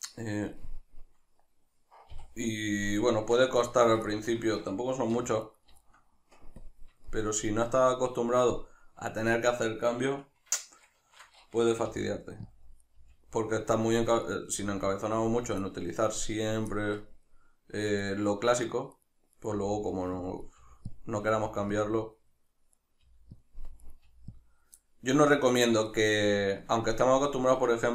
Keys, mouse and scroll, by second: 2.2 KP_Divide, 3.2 Tab, 5.2 1, 5.4-5.8 right drag, 5.8 shift+middle click, 6.6-7.1 drag, 7.1-9.4 shift+middle drag, 9.4 right click, 10.6 shift+Tab, 11.9 g, 12.6 click, 12.8 right click, 13.0 g, 13.8 click, 14.2 right click, 14.6 g, 15.3 click, 15.6-18.0 middle drag, 18.0-19.1 right drag, 19.3 right click, 19.5 g, 20.3 click, 20.4 right click, 20.6 g, 20.9 click, 21.2 right click, 21.3 g, 21.9 click, 22.7 right click, 23.0 g, 23.4 click, 23.8 right click, 24.1 g, 24.4 click, 24.8-27.9 middle drag.